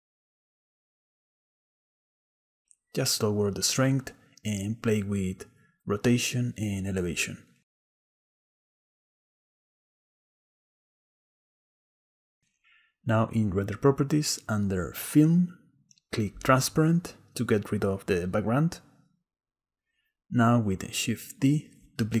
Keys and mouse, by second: 2.2-4.2 drag, 5.6 click, 6.6 click, 8.7 click, 9.6 click, 10.1 click, 11.2 shift+click, 11.7 shift+click, 12.8 click, 14.6 click, 16.3 click, 20.3 click, 21.2 click.